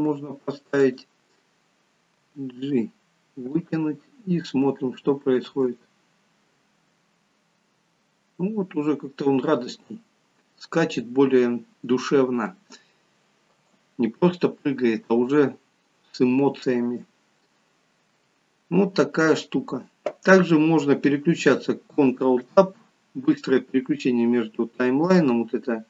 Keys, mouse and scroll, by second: 0.9 click, 2.2 g, 4.6 scroll down 1, 5.2 scroll down 2, 5.4 space, 13.5 space, 16.4 scroll down 5, 17.1-18.6 scroll down 12, 19.0-20.2 scroll up 2, 22.5 ctrl+Tab, 24.1-24.9 scroll up 11, 25.2 middle click.